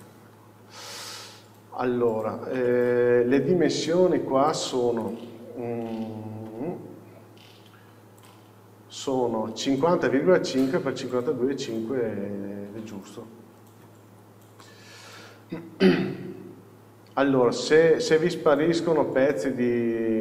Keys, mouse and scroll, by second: 0.6-1.1 scroll up 1, 1.1 click, 1.7-2.7 scroll down 1, 2.7 alt+a, 3.4 click, 4.6 click, 5.1 click, 6.0 n, 8.3 click, 14.2 n, 14.7-20.2 middle drag, 15.5 scroll up 1, 19.0-20.0 scroll down 1, 20.0-20.2 scroll up 1.